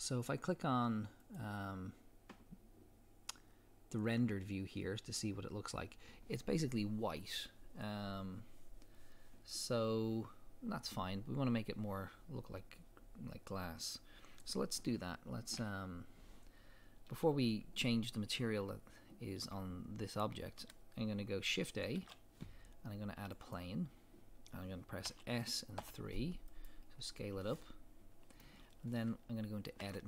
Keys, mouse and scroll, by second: 1.3 click, 15.6 KP_7, 22.0 shift+a, 25.1 s, 25.4 middle click, 26.7 click, 27.0 scroll down 1, 27.6-30.0 middle drag, 28.7-29.4 scroll up 2, 29.4-29.9 scroll up 1, 29.9 Tab.